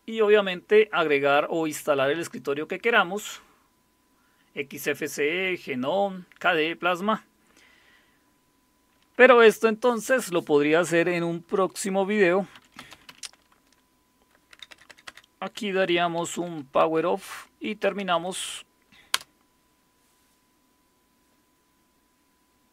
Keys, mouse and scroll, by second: 12.3-14.9 typing, 15.9-18.6 typing, 19.1 Return, 20.0 typing.